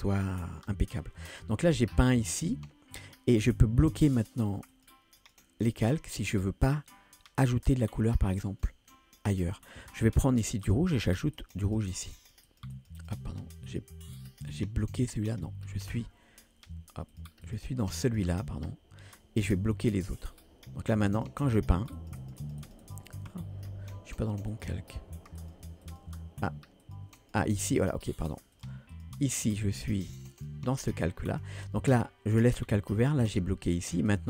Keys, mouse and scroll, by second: 1.7-6.7 drag, 8.3 click, 10.6 click, 11.4 click, 11.7 click, 11.9 click, 12.2 click, 12.5 click, 12.8 click, 13.0 click, 13.7-20.6 drag, 21.1 click, 21.4 click, 21.7 click, 22.0 click, 22.2 click, 22.4 click, 22.7 click, 22.9 click, 23.2 scroll up 2, 23.6-24.5 scroll down 2, 24.5-33.4 drag, 34.0 click.